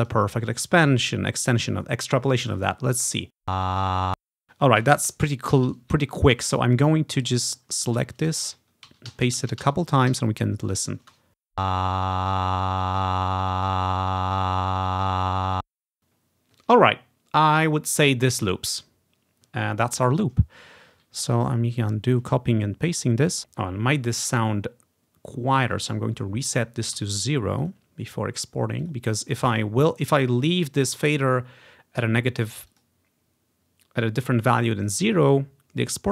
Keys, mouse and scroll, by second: 1.4-3.0 drag, 3.6 space, 4.3 space, 6.0 Right, 6.2 Right, 6.3 Right, 6.5 Right, 6.5 Right, 7.4 click, 8.4 Right, 9.0 ctrl+v, 9.2 Right, 9.7 ctrl+v, 9.8 Right, 10.2 ctrl+v, 10.8-13.4 drag, 11.1 space, 16.0 space, 21.4 ctrl+z, 21.6 ctrl+z, 21.7 ctrl+z, 21.9 ctrl+z, 22.2 ctrl+z, 23.0-24.7 drag, 25.7-31.7 drag, 27.1 0, 32.8 click, 34.9-36.1 drag.